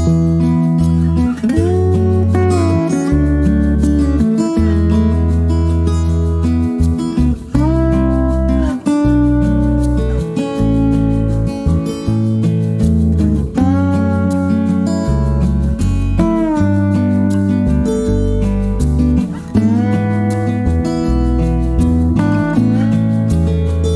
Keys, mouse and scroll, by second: 0.5 click, 2.1 click, 4.2 click, 4.6 click, 6.2 7, 7.3 Return, 9.7 shift+click, 11.6 click, 12.8 click, 14.1 click, 14.9 click, 15.9 click, 17.1 click, 18.1 click, 19.3 click, 19.8 middle click, 20.2 click, 20.8 middle click, 21.0 click, 21.4 middle click, 21.5 click, 23.1 click.